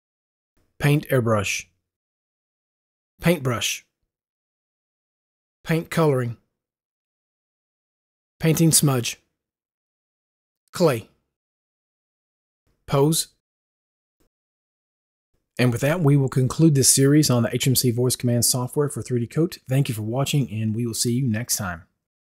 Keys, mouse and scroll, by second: 0.7 u, 1.9 u, 3.0 u, 4.6 u, 7.0 u, 9.7 u, 10.2 u, 11.8 u, 13.5 u.